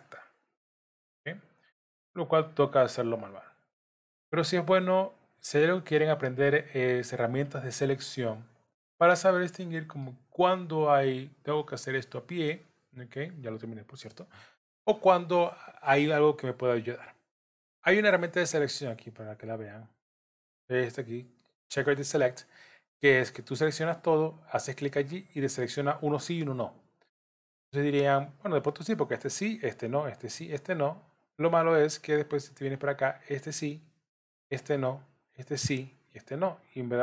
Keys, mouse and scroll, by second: 0.5-8.9 shift+click, 9.2 middle click, 19.3 click.